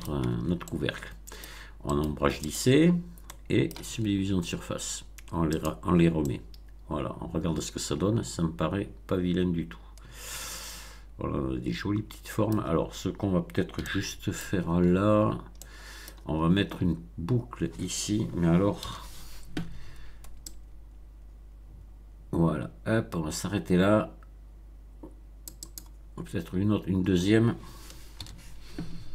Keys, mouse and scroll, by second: 0.3 shift+Tab, 0.6-1.5 shift+middle drag, 1.9 right click, 2.4 click, 3.2-3.8 middle drag, 5.5 click, 6.1-12.7 middle drag, 13.8-14.6 shift+middle drag, 14.7 Tab, 15.1-15.5 shift+scroll up 2, 15.5 middle click, 18.7 ctrl+r, 20.4-25.9 drag, 28.1 ctrl+r.